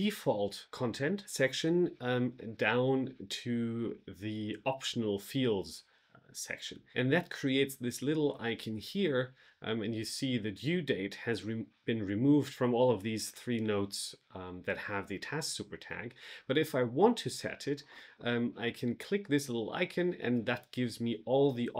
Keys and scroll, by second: 0.2 alt+f.